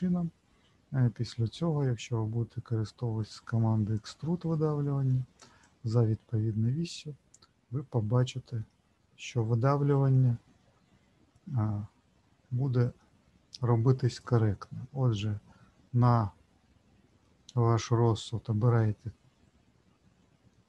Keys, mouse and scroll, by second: 4.0 click, 5.6 click, 15.3-16.9 scroll up 1, 17.2 middle click.